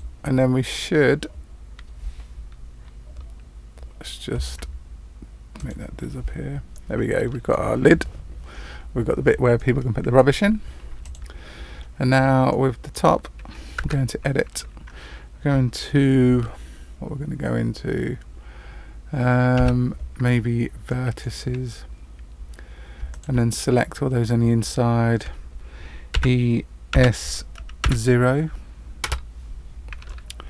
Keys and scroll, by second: 13.8 Tab, 19.5 1, 26.1 e.